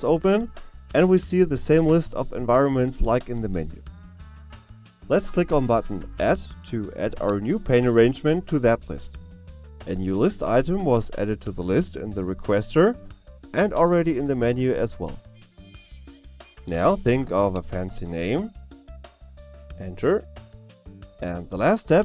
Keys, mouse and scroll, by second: 16.9 click.